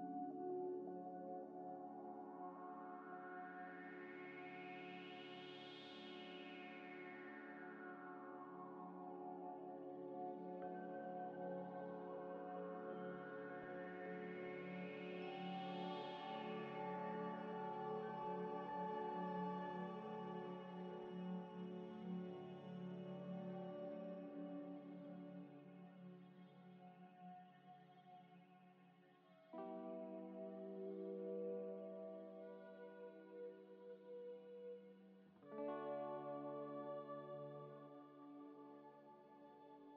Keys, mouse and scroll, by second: 4.8 scroll up 1, 5.4 middle click, 7.9 scroll up 1, 8.0 middle click, 8.8 scroll down 1, 8.9 middle click, 15.4 middle click, 15.4 double click, 16.5 middle click, 18.0 scroll down 1, 21.1 scroll down 1, 21.9 scroll down 1, 22.0 scroll up 1, 22.7 middle click, 23.5 shift+click, 23.9 ctrl+c, 25.5 scroll down 1, 25.7 middle click, 26.1 ctrl+v, 27.5 double click, 28.0 scroll up 1, 31.0 middle click, 31.8 scroll up 1, 32.8 middle click, 32.8 scroll up 1, 33.9 middle click, 34.6 scroll down 1, 35.2 middle click, 36.2 ctrl+right click, 37.6 scroll down 1, 39.0 middle click, 39.4 scroll up 1, 39.6 middle click.